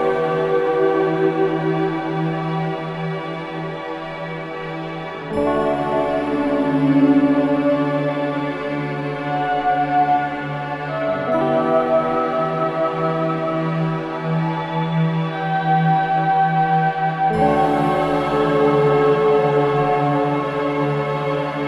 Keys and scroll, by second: 0.5 ], 1.8 ctrl+z, 5.9 ], 9.0 ], 10.0 ], 13.5 l, 13.8 i, 13.8 g, 13.9 t, 16.4 4, 19.1 e, 19.8 [, 21.3 ].